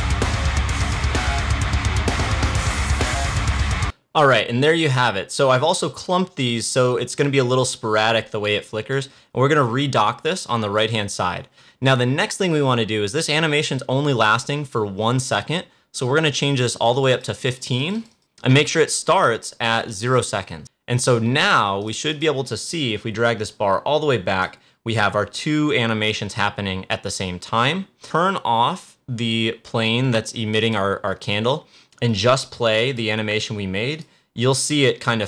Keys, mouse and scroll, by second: 2.2-3.8 drag, 8.8-13.0 drag, 16.6-28.0 drag, 30.5 click.